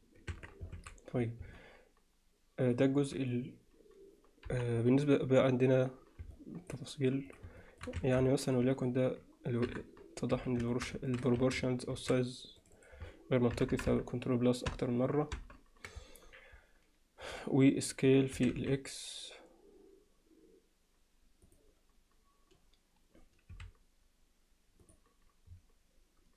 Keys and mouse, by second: 0.3 Tab, 0.8 alt+a, 1.6-3.1 alt+middle drag, 4.5 KP_1, 6.3-6.7 middle drag, 7.3 click, 7.6 alt+shift+middle drag, 8.0 Tab, 8.3 middle click, 8.8 click, 9.7 KP_7, 10.3 z, 10.7 shift+middle click, 11.1 ctrl+middle drag, 11.4 a, 12.0 alt+a, 12.6 click, 12.8 click, 13.6 ctrl+KP_Add, 18.4 s, 23.5 s.